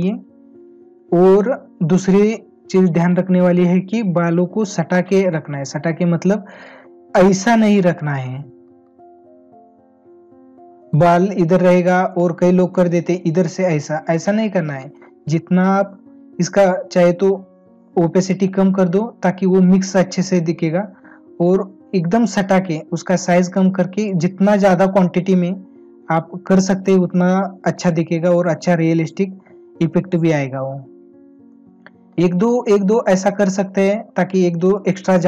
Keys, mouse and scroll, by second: 6.7 ctrl+-, 8.6 ctrl+alt+z, 11.6 space, 14.2 ctrl+alt+z, 17.8 space, 27.2 space, 31.6 space.